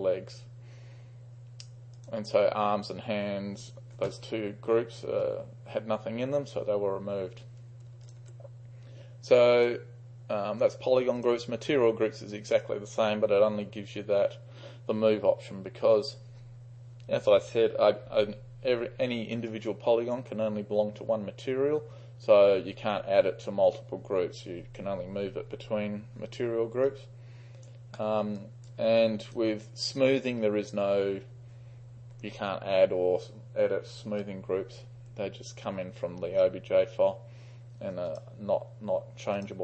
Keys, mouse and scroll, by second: 8.1 ctrl+click, 11.2 click, 19.5-20.2 right drag, 27.0-27.8 right drag, 28.0 middle click, 28.4-28.8 drag, 29.3 click, 30.0 click, 38.2-39.6 drag.